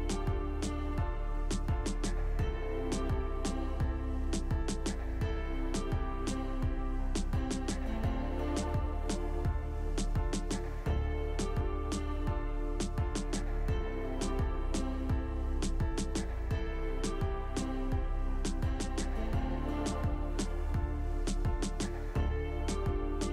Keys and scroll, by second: 0.6 alt+w, 2.6 alt+w, 3.7 alt+w, 5.0 alt+w, 6.1 alt+w, 8.7 alt+w, 12.4 alt+w, 16.2 alt+w, 17.3 alt+w, 18.6 alt+w, 20.4 alt+w, 21.3 alt+w, 22.9 alt+w.